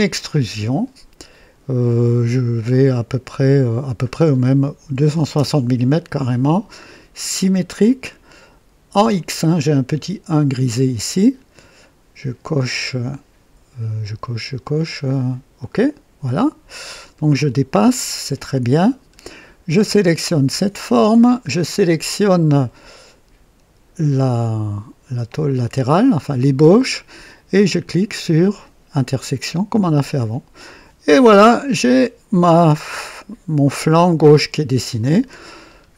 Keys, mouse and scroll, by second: 0.0 click, 2.6 click, 3.9-4.9 scroll down 2, 4.9 KP_2, 5.0 KP_6, 5.2 KP_6, 5.3 KP_0, 7.3 click, 8.5 typing, 12.5-13.2 drag, 14.5-15.3 drag, 15.5 click, 16.8-17.7 drag, 17.8 click, 18.8-19.3 scroll up 2, 19.3 right click, 20.6 click, 25.2 ctrl+click, 28.9 click, 30.6-35.3 drag, 35.6 scroll up 2.